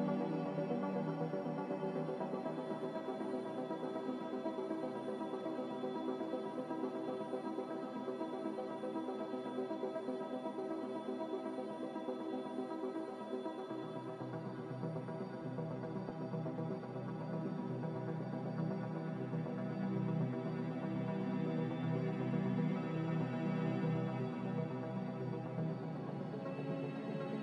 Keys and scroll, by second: 1.3 f, 13.6 n, 14.6 e, 17.1 n, 22.3 a, 23.6 typing, 25.7 1, 26.7 1, 26.7 3.